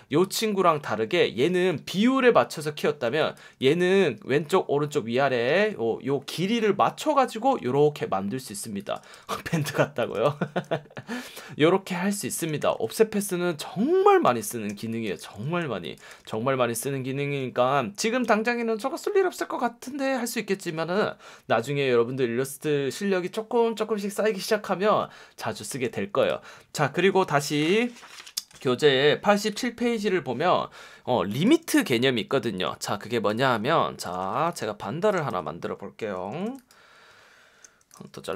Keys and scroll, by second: 1.4 F1, 3.0 space, 4.2 F1, 5.4 F1, 8.6 space, 9.1 v, 9.7 space, 10.2 v, 12.0 space, 12.6 v, 14.2-16.1 typing, 17.6 space, 31.1 space, 34.2 v, 35.3 v.